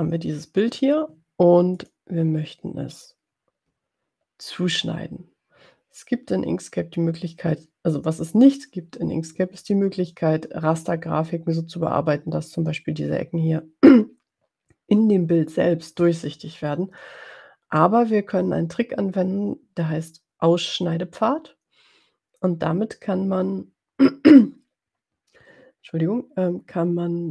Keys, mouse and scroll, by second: 1.8 click.